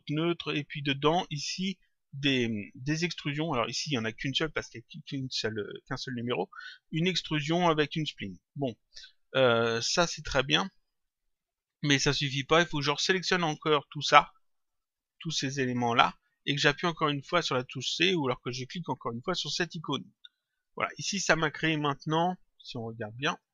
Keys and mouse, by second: 10.3 click, 10.9 ctrl+click, 12.3 click, 14.8 shift+click, 19.9 click, 22.2 click, 23.3 ctrl+click.